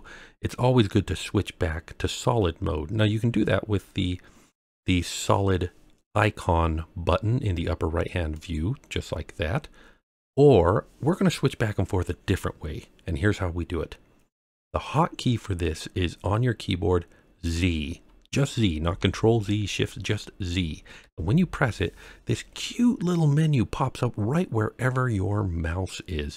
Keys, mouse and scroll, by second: 8.4 click, 9.3-9.7 scroll up 1, 9.9-10.7 scroll down 2, 13.2 scroll up 1, 21.0 z.